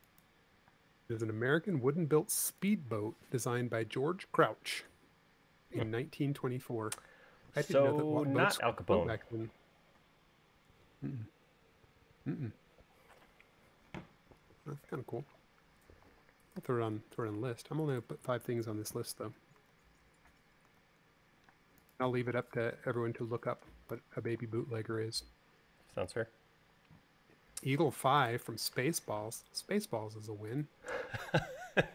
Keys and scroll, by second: 1.1 space, 17.3 u, 18.6 u, 20.5 super+z, 21.6 super+z, 24.7 u.